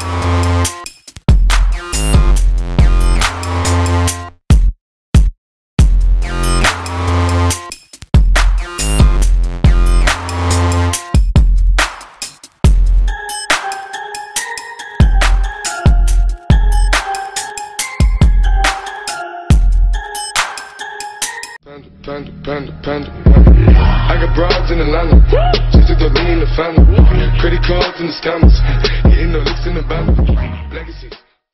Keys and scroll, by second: 4.2 ctrl+z, 13.6 ctrl+g.